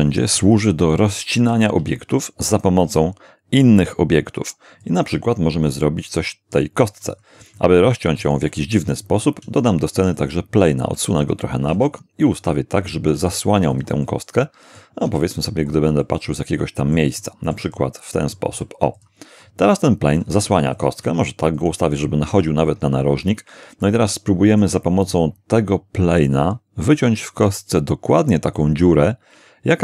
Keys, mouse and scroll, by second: 1.4 shift+a, 4.8 click, 5.7-6.7 middle drag, 6.8-7.1 scroll up 2, 7.6 shift+middle click, 9.4 shift+a, 10.2 shift+click, 10.9 shift+g, 11.2 shift+click, 11.6 r, 11.7 r, 12.8 shift+click, 13.2 s, 13.7 click, 14.1 middle click, 15.1 g, 15.7 click, 16.2 middle click, 17.2-18.5 shift+middle drag, 18.5 shift+g, 19.0 shift+click, 20.5 s, 20.7 click, 21.0 g, 21.5 click, 23.8-24.8 shift+middle drag.